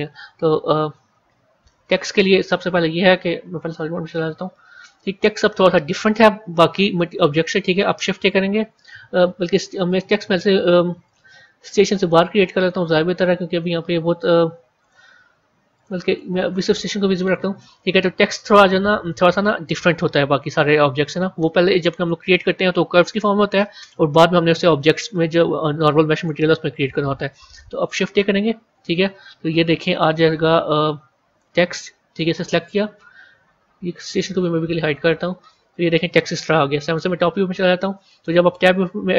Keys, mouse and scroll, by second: 3.5 z, 4.2 z, 5.8-7.5 middle drag, 7.5 scroll down 1, 9.8 click, 10.9 click, 12.5 click, 14.7 click, 15.6 click, 16.0 click, 16.5 click, 17.2 scroll up 2, 19.5-20.4 scroll up 3, 27.9 shift+a, 34.2 click, 35.0-36.5 scroll up 14, 36.5 KP_7.